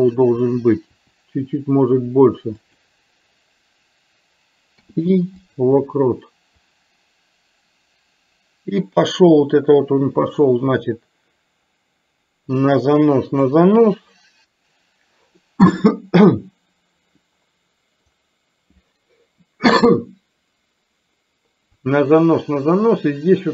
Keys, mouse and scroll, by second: 1.0 r, 4.8 i, 6.6-13.6 drag, 18.3-23.5 drag.